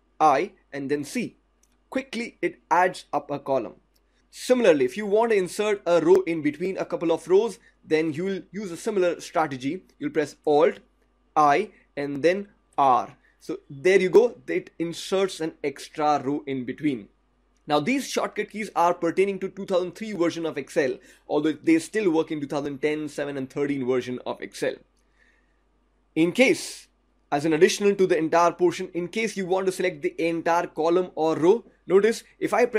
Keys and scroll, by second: 0.0 alt+c, 10.9 alt+r.